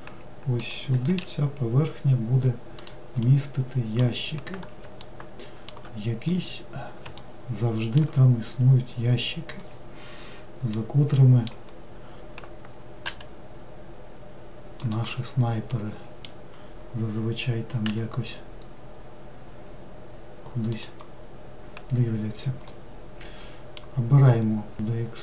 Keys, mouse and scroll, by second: 1.2 s, 3.4-6.4 middle drag, 6.4-7.3 scroll up 1, 7.3-10.3 shift+middle drag, 10.8-13.1 middle drag, 13.1 g, 15.8-17.9 middle drag, 17.9 e, 22.7-24.7 middle drag, 24.7 e.